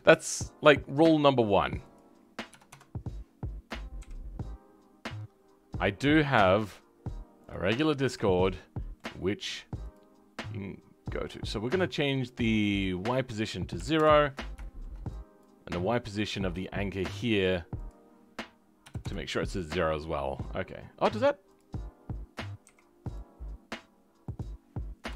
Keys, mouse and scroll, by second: 2.6-7.6 drag, 7.6-8.2 scroll up 5, 8.2-9.8 shift+middle drag, 9.8 click, 13.9 click, 14.2-14.5 scroll down 2, 14.5 shift+middle click, 15.3 click, 18.9 click, 19.3-19.8 scroll down 3, 19.8-21.5 middle drag, 21.5 click.